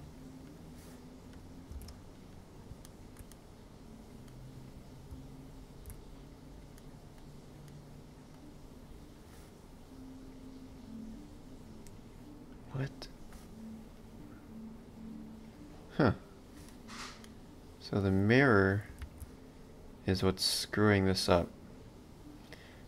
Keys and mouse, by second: 0.5 click, 1.8 ctrl+space, 2.2 click, 2.8 ctrl+middle click, 5.1 ctrl+b, 6.8 middle click, 10.0 click, 17.2 middle click, 19.1 ctrl+z, 21.0 click.